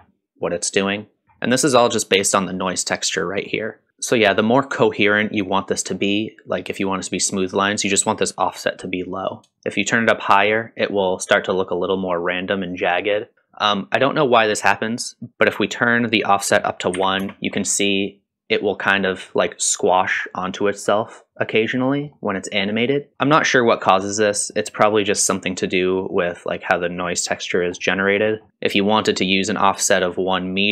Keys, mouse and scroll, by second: 1.2-1.6 scroll down 1, 1.6 middle click, 3.2 middle click, 3.9-4.7 scroll up 3, 9.6-13.3 shift+drag, 15.3 middle click, 15.3 click, 15.3 m, 16.4-17.7 drag, 19.4 middle click, 21.4 middle click, 23.1-23.4 scroll down 2, 23.4 middle click, 24.1 scroll down 1, 24.3 middle click, 27.7 scroll up 1, 28.0 middle click, 28.3 scroll up 2.